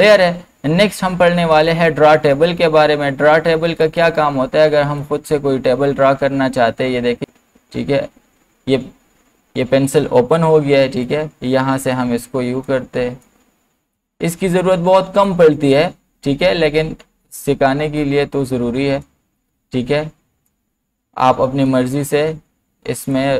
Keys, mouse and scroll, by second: 0.0 click, 3.8-9.0 drag, 11.0-18.0 drag, 18.0-23.3 drag.